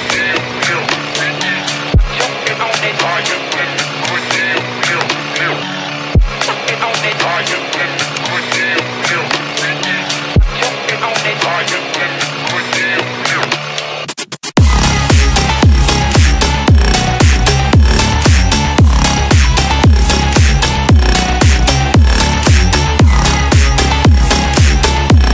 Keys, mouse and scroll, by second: 2.7-4.9 drag, 5.3-6.3 drag, 7.5-9.1 drag, 10.3-12.2 drag, 12.6-13.4 middle drag, 14.5-16.7 drag, 17.2-19.1 drag, 19.9-21.4 middle drag.